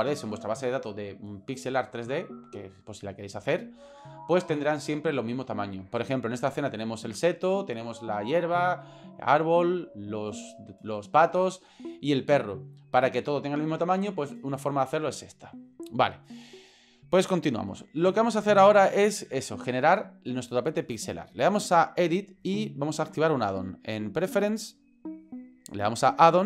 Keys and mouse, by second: 22.1-24.4 drag.